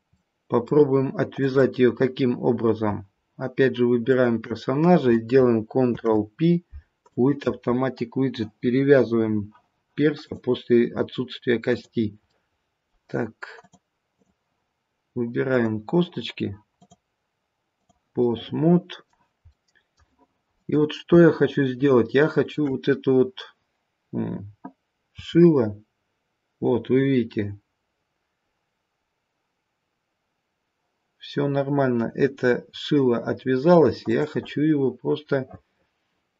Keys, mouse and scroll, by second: 0.1 middle click, 1.3 click, 4.0 shift+click, 5.8 ctrl+p, 10.2 click, 12.2 middle click, 13.5 click, 15.4 click, 17.9 click, 18.2 middle click, 19.4 middle click, 20.5-21.0 scroll down 1, 21.0 middle click, 21.2 shift+middle click, 25.1 r, 34.4 middle click.